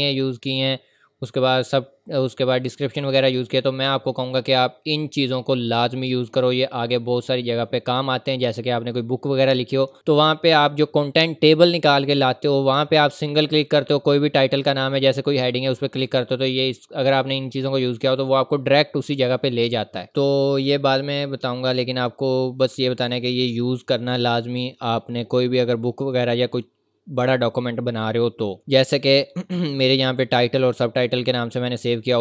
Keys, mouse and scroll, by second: 8.5-9.1 scroll up 1, 9.1 scroll down 1, 20.1-20.5 scroll up 1, 20.5-21.0 scroll down 1, 21.0-21.9 scroll up 1, 26.0 click, 29.4 scroll down 1.